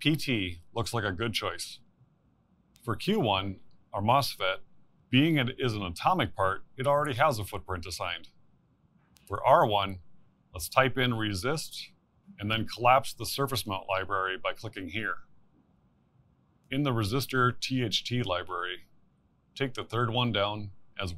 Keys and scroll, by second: 8.7 BackSpace, 11.5-13.4 typing.